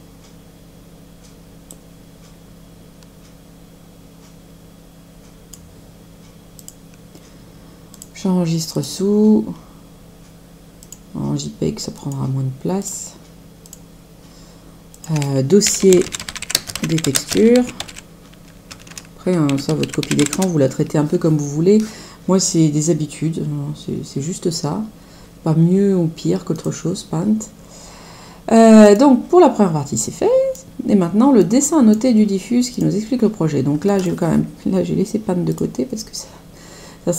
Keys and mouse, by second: 1.7 click, 6.5 click, 7.9 click, 26.7 click, 28.8 click.